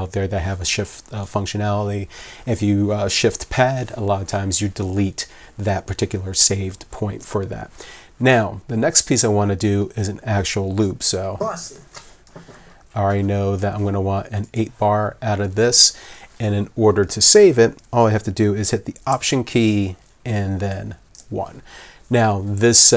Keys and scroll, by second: 11.9 w, 20.7 alt+1.